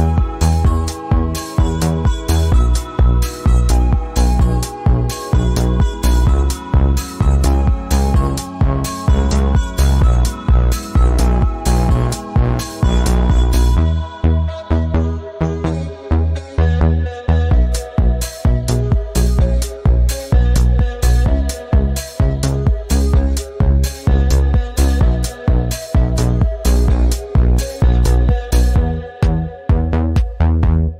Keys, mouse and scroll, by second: 0.0-1.2 typing, 3.0 shift+Return, 3.5-7.1 typing, 9.1-11.5 typing, 13.1 click, 14.6 click, 19.2 scroll down 1, 21.0 click, 21.6-22.4 scroll down 1, 22.4 click, 25.6-28.3 drag, 30.0 click.